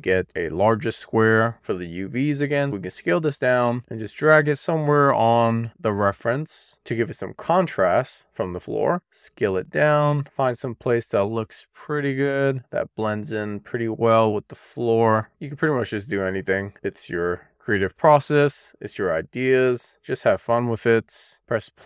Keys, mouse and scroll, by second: 1.3-2.4 scroll up 1, 2.4-2.8 scroll up 1, 2.8 r, 3.0 click, 5.3 w, 6.7 click, 7.9 e, 8.4 r, 9.2 click, 9.5 w, 10.1 scroll up 1, 10.2 middle click, 10.4 click, 10.7 middle click, 10.9 click, 11.1 middle click, 11.5-11.9 scroll down 1, 12.2 click, 12.4 w, 12.7 middle click, 13.0 click, 13.5 middle click, 13.6 click, 14.3 middle click, 14.7 scroll up 1, 14.9 scroll down 1, 15.1 w, 15.2 e, 15.5 click, 15.7 q, 16.0 w, 16.1 click, 16.3 middle click, 16.7 scroll down 2, 16.9 click, 18.4 shift+middle click, 19.0 middle click, 19.3 scroll up 1, 19.5 e, 19.8-20.4 scroll down 2, 21.3 middle click.